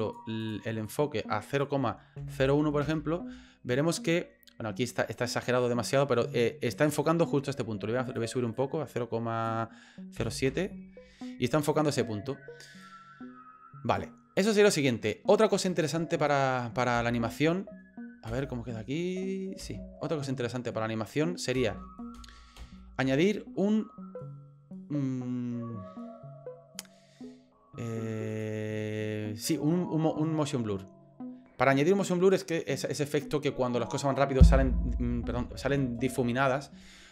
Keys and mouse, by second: 0.5-3.5 drag, 8.1-11.2 drag, 12.8-14.0 drag, 14.9-16.8 drag, 17.0 space, 18.3 space, 19.6 space, 21.6 space, 22.1 space, 22.6 space, 28.3 click.